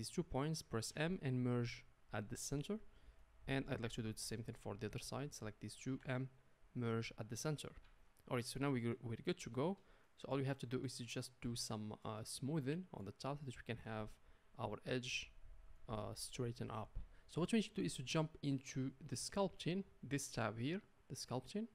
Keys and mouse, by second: 0.9 m, 5.9 m, 7.8 Tab.